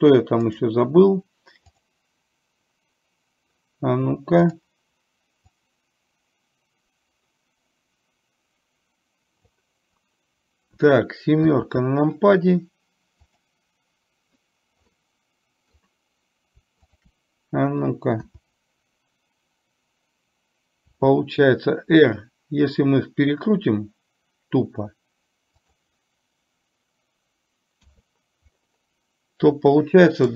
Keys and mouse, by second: 0.5-2.0 right drag, 4.5 click, 5.6-9.6 drag, 13.4 click, 15.0-15.8 middle drag, 17.0 shift+click, 21.1 r.